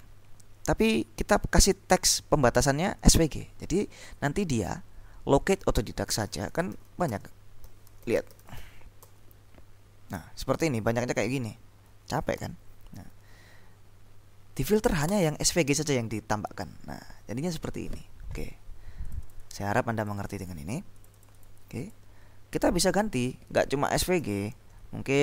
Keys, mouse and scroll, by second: 6.1-9.3 typing, 12.5 ctrl+l, 13.1 ctrl+Up, 15.2 Return, 19.2 click, 20.2 click, 21.2-22.5 drag, 24.2 ctrl+l, 24.6 ctrl+shift+Up.